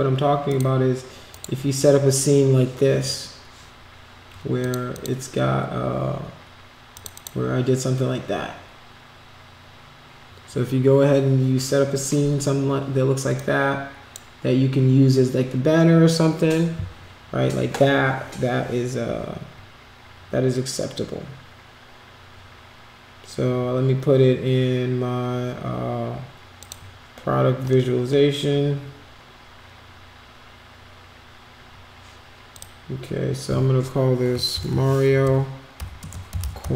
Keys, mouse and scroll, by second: 0.5 click, 1.3 click, 4.6 click, 4.9 click, 6.9 click, 7.1 click, 13.3 click, 26.6 click, 32.5 click, 34.8-36.7 typing.